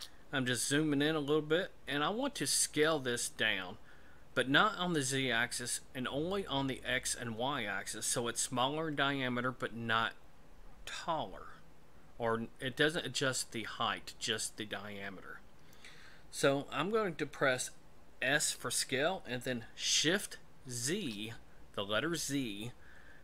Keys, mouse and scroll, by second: 0.2-2.0 scroll up 3, 18.4 s.